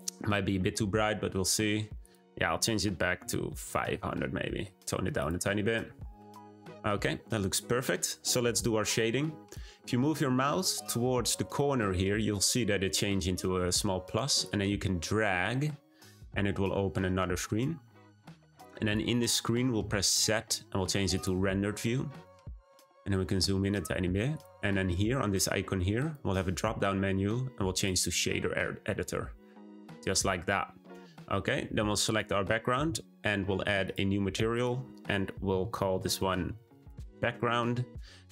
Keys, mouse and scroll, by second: 1.1-2.0 scroll up 1, 2.0-3.8 drag, 3.8 0, 5.1 click, 6.2 scroll up 1, 14.4-17.4 drag, 18.8 click, 19.7 z, 21.2 z, 22.3-22.9 scroll up 2, 23.4 scroll up 1, 24.3 click, 25.9-32.1 drag, 33.8-37.5 drag.